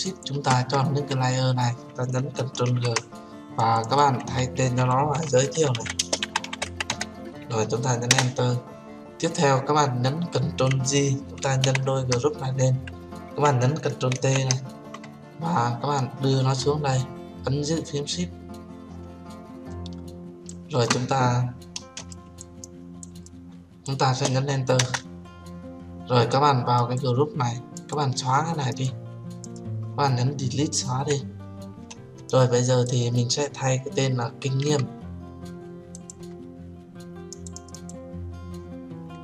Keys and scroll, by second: 3.0 ctrl+g, 8.4 Return, 12.0 ctrl+j, 14.5 ctrl+t, 25.1 Return, 31.3 Delete.